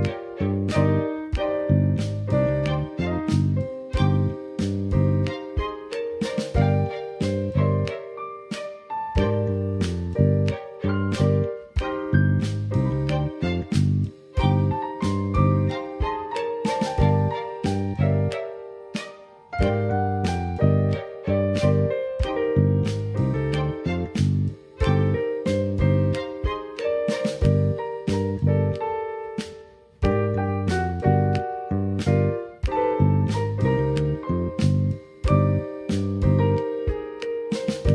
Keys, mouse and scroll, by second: 2.9-5.6 drag, 7.5-11.8 drag, 11.2 scroll up 1, 11.8 scroll up 1, 11.9-12.9 middle drag, 14.4 middle click, 15.3-21.3 middle drag, 21.2 scroll down 2, 27.0 click, 31.9 q, 35.4-36.2 drag, 36.2 q.